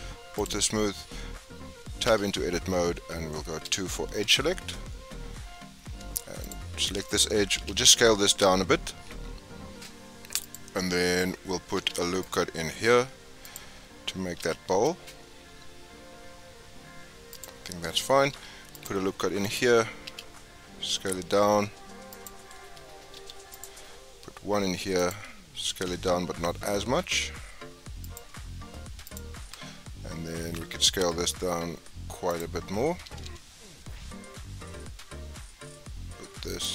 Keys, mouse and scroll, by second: 1.1-2.0 scroll up 1, 2.0 Tab, 3.6 2, 6.4 alt+click, 7.5 s, 11.7 ctrl+r, 14.4 s, 18.3 ctrl+r, 20.0 s, 23.1 ctrl+r, 25.7 s, 29.0 alt+click, 30.4 s, 33.0 g.